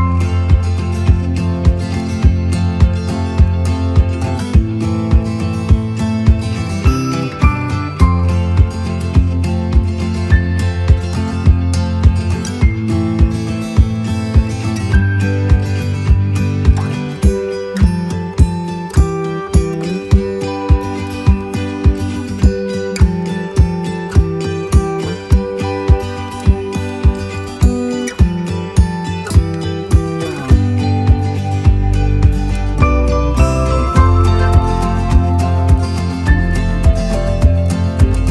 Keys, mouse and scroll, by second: 2.6 click, 3.7 click, 4.6 shift+click, 5.9 click, 6.6 click, 7.0 right click, 8.4-10.3 right drag, 10.6 right click, 11.8 right click, 12.2 click, 13.8 click, 15.4 click, 16.9 click, 17.4 click, 18.0 click, 19.0 click, 21.0 click, 21.5 click, 22.0 click, 23.1 click, 24.2 click, 24.8 click, 25.4-27.4 drag, 27.8 right click, 29.8-30.8 drag, 31.1-33.4 right drag, 33.8-34.4 scroll up 1, 34.4-35.4 right drag, 36.4 click, 37.6 shift+click.